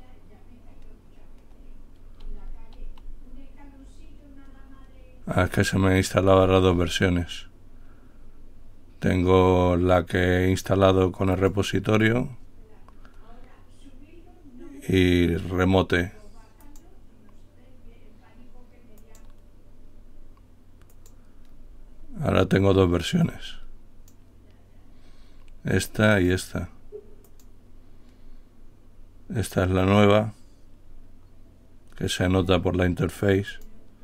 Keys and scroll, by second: 2.8-3.6 typing.